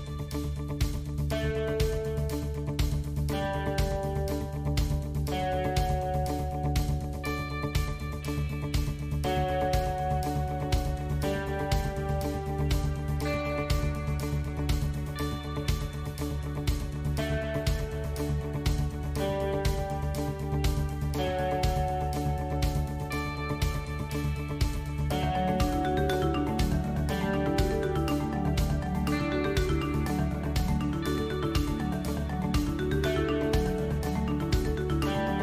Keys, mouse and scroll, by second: 0.6 alt+click, 1.7 KP_1, 2.8 shift+d, 4.8 Escape, 5.3-6.1 scroll down 1, 6.1-6.6 scroll down 2, 6.6 shift+middle click, 8.7 s, 18.9 alt+e, 24.7 middle click, 25.9 click, 26.6 middle click, 29.4 a, 32.0 alt+n, 34.0 middle click.